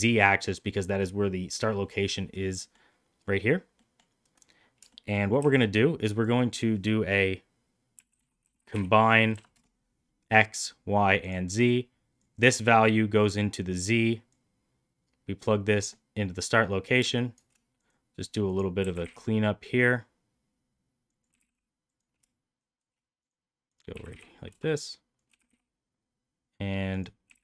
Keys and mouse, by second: 3.8 middle click, 4.9 shift+middle click, 5.3 shift+a, 12.1-13.3 drag, 14.3-15.8 drag, 17.1 shift+right click, 17.8 drag, 18.5 drag, 18.7 g, 21.2 g, 22.5 shift+right click, 23.6 click, 23.9 g, 25.2 g, 27.2 g.